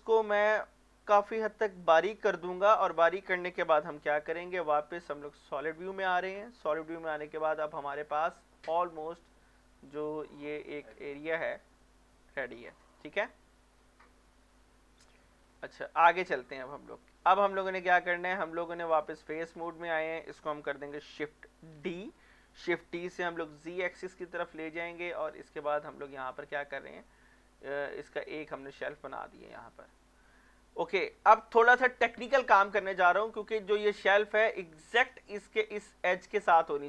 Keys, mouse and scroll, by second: 1.9 click, 2.3-4.5 middle drag, 4.5 z, 5.2 scroll down 1, 5.5 middle click, 6.0 shift+middle click, 6.9-7.2 scroll up 1, 7.2 middle click, 8.3 Tab, 9.9 click, 10.6 scroll down 1, 10.8-12.5 middle drag, 12.5 scroll down 1, 12.8 middle click, 13.1 scroll up 1, 13.6 shift+middle click, 14.6 middle click, 15.4 scroll up 1, 16.1 middle click, 16.5-17.3 scroll down 1, 17.3 middle click, 17.8 Tab, 18.9 click, 19.3-19.6 scroll down 1, 19.6 middle click, 19.9 scroll up 1, 21.7 shift+d, 23.2 z, 24.5 click, 24.9 middle click, 25.2 scroll down 1, 26.3 scroll up 1, 26.8-28.3 middle drag, 28.3 scroll up 1, 28.8 middle click, 29.0 shift+middle click, 29.6-31.3 scroll up 1, 31.3 middle click, 32.7-33.0 scroll down 1, 33.3-35.6 middle drag.